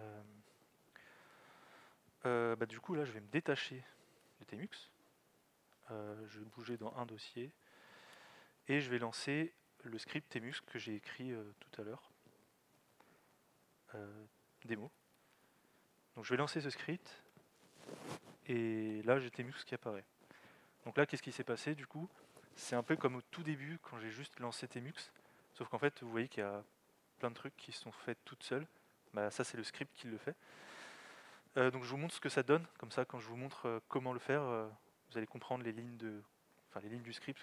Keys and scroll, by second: 3.1 alt+x, 4.2 typing, 5.9-7.8 typing, 9.1-11.3 typing, 14.7-15.7 typing.